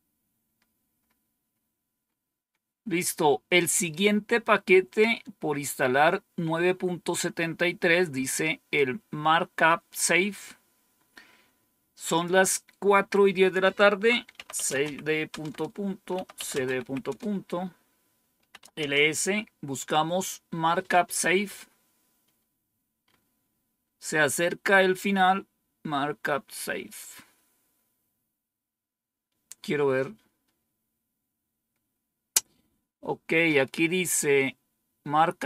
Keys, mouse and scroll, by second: 0.3 scroll down 1, 0.9 scroll down 1, 1.4 scroll down 1, 2.8 scroll down 1, 3.7 click, 12.0 click, 14.0-18.9 typing, 15.4 Return.